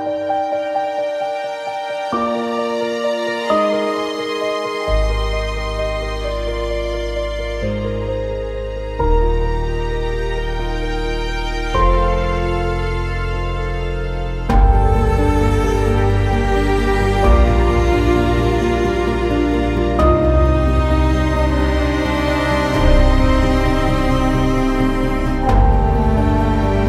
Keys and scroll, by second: 0.6 alt+x, 10.6 w.